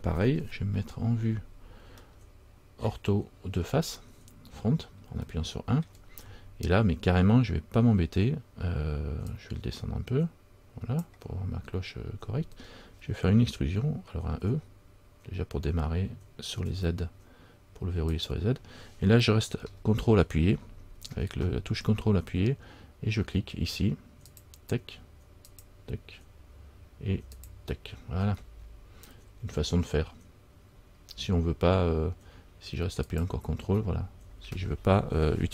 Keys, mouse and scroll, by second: 0.5 KP_1, 2.2-3.7 shift+scroll up 1, 3.7 shift+middle click, 5.3 shift+scroll down 1, 5.5 shift+middle click, 5.5-7.2 shift+scroll up 2, 9.4 click, 24.4 click, 24.5 ctrl+click, 25.6 ctrl+click, 33.2 ctrl+click.